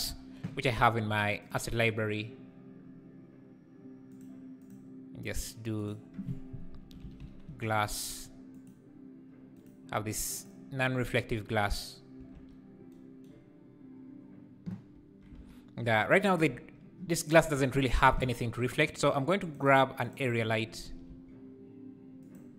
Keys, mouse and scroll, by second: 0.0 n, 1.8 click, 4.1 click, 4.6 click, 7.9 click, 12.6 ctrl+s, 15.3 alt+a, 15.5 scroll down 2, 16.8-17.8 scroll down 2, 17.8 shift+right click, 18.0 shift+a, 20.4 `, 20.8 r.